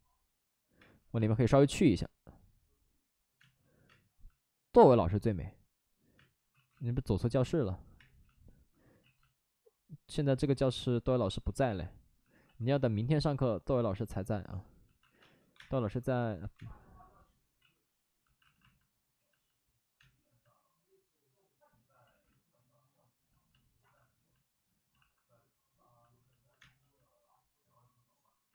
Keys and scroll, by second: 0.7 space, 1.1 space, 6.1 space, 6.5 ctrl+z, 7.9 space, 8.9 ctrl+z, 12.4 ctrl+z, 14.9 alt+s, 15.1 space, 15.4 1, 15.5 space, 16.3 ctrl+z, 16.5 space, 17.5 ctrl+z, 18.3 alt+s, 19.9 space, 22.0 ctrl+z, 23.7 alt+s, 24.9 alt+s, 26.5 space, 28.4 ctrl+z.